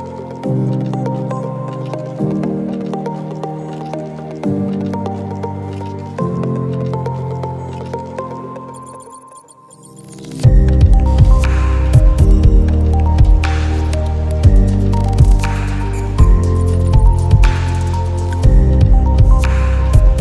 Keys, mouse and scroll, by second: 7.1 alt+scroll down 1, 7.7 space, 7.8 click, 8.0 space, 8.5 alt+scroll down 1, 8.8 space, 8.9 click, 9.2 space, 10.0 alt+scroll up 1, 10.3 space, 10.5 click, 10.7 space, 11.4 click, 12.4 right click, 12.8 click, 13.4 alt+scroll down 1, 13.7-16.1 drag, 18.2 click, 18.7 right click, 19.2-20.2 drag.